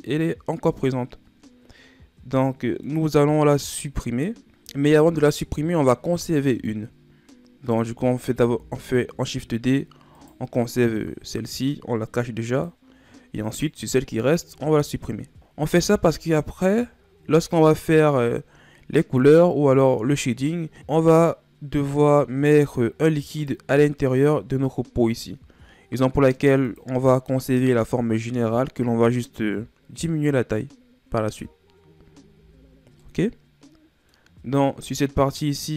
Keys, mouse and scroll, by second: 4.4-7.0 middle drag, 8.4 shift+d, 12.4 click, 13.4-14.5 right drag, 14.5 Tab, 15.2 ctrl+Tab, 15.3 right click, 15.6 x, 23.3 click, 26.6 click, 32.3 Tab, 33.0-35.7 middle drag.